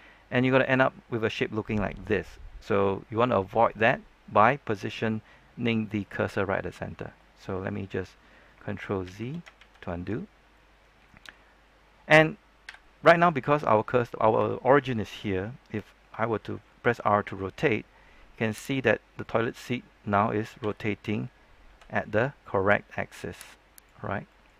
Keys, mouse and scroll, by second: 7.9-8.5 scroll up 1, 9.0 shift+z, 10.2 ctrl+z, 10.2 scroll down 1, 10.5 middle click, 11.2-12.6 scroll up 1, 12.6 KP_3, 13.3 shift+middle click, 13.8-14.3 scroll up 1, 14.4 shift+middle click, 16.4 r, 18.7 right click, 19.0 scroll down 1, 19.2 middle click, 19.6-20.5 scroll up 1, 20.5 r, 21.6 x, 24.0 scroll down 1, 24.2 middle click.